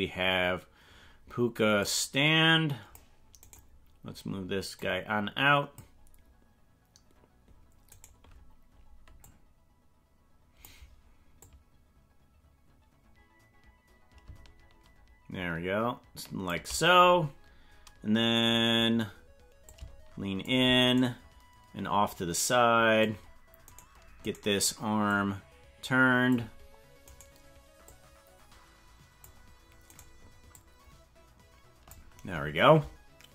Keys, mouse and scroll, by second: 1.8-3.1 drag, 3.5 right click, 4.7-5.8 drag, 8.0 right click, 9.2-10.7 drag, 11.5-16.5 drag, 19.7 shift+click, 20.9 right click, 22.1-23.1 drag, 24.3 right click, 25.1-26.3 drag, 27.2 right click, 27.8-29.3 drag, 30.0 right click, 30.5-31.9 drag.